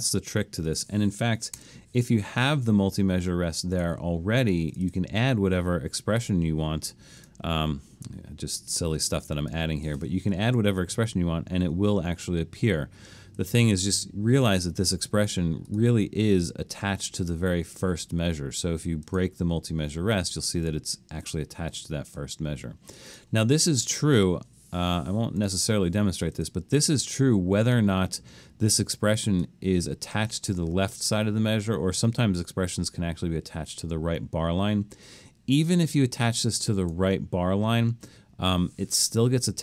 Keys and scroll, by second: 1.6 BackSpace, 10.1 Escape, 10.5 super+z.